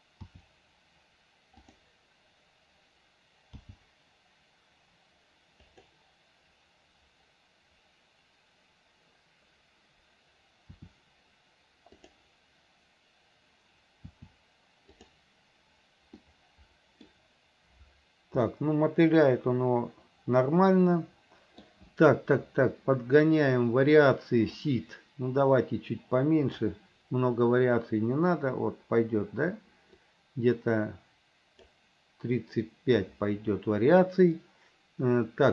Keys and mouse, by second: 0.4 r, 3.8 g, 10.9 r, 14.3 r, 16.3 middle click, 18.6-21.8 middle drag, 24.7-26.7 drag, 30.1-31.8 drag.